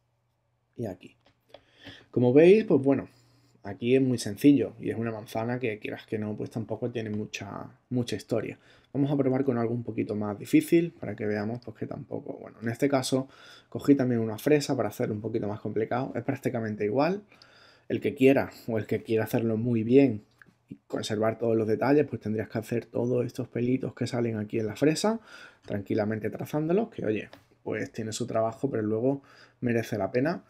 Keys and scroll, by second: 10.0 super+Tab.